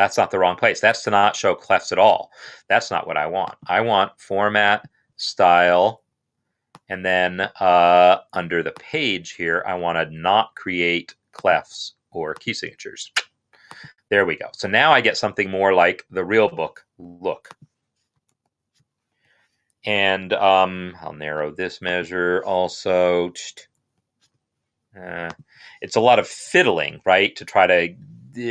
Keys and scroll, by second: 18.1 shift+[, 18.9 Escape, 22.9 shift+[, 23.6 shift+[, 25.8 shift+[, 26.7 Escape.